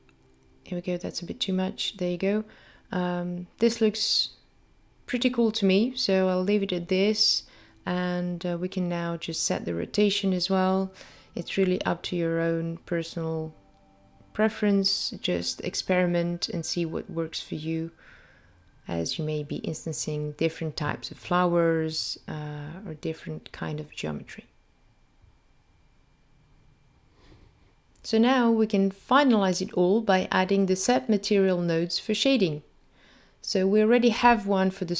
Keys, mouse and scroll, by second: 0.2-1.1 scroll up 2, 1.6 scroll down 1, 2.2-2.6 scroll down 1, 3.5-3.9 scroll up 1, 12.3 middle click, 15.1 click, 19.0 click, 21.6 click, 29.4-30.0 scroll down 1, 30.0 scroll down 2, 30.5 middle click, 34.2 click.